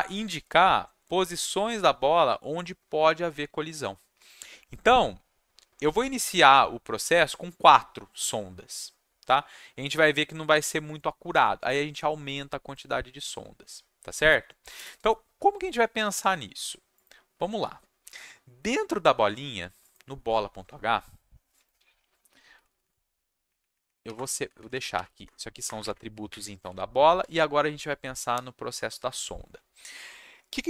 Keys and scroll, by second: 22.5 Down, 22.7 Down, 22.8 Down, 23.1 Down, 23.4 Up, 23.6 Up, 23.7 Up, 23.8 Up, 24.1 Return, 24.3 Down, 24.4 Down, 24.5 Down, 24.7 Down, 25.2 Return, 25.6 Return, 25.8 Return, 25.8 Up, 26.2 Up, 26.6 Down, 27.2 Tab.